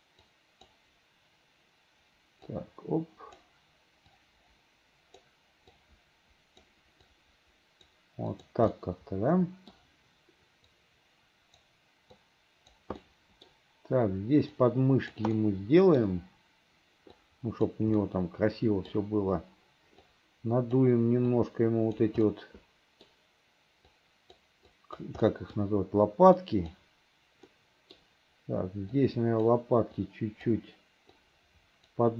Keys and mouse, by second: 0.4 click, 2.6 click, 4.2-5.4 drag, 5.9 click, 7.2 click, 8.4 click, 8.9 middle click, 10.9 click, 12.3 click, 13.1 middle click, 14.7 right click, 15.5 click, 17.3 right click, 18.1 click, 20.2 right click, 21.5 right click, 22.3 middle click, 24.0 right click, 24.8 right click, 25.3 middle click, 26.5 right click, 27.6 middle click, 29.1 right click, 30.1 right click, 31.2 right click.